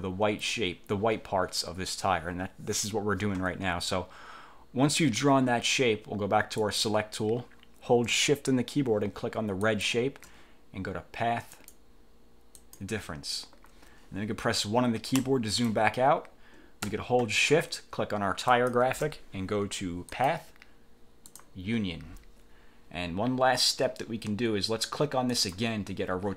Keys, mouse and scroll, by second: 6.7 click, 9.7 shift+click, 11.7 click, 12.7 click, 15.3 1, 18.6 shift+click, 20.3 click, 21.4 click, 25.4 click.